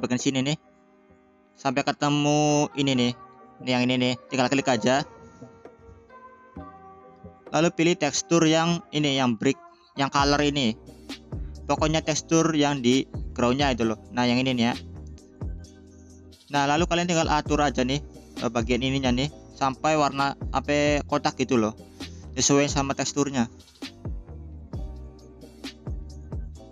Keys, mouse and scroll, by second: 0.0-1.6 scroll down 5, 1.6-2.8 scroll down 2, 2.8-4.6 scroll up 1, 4.6-5.3 scroll up 2, 7.2-14.8 drag, 14.8-16.0 scroll down 5, 18.2-18.8 scroll down 1, 18.8-20.0 drag, 21.5 g, 25.2-26.7 drag.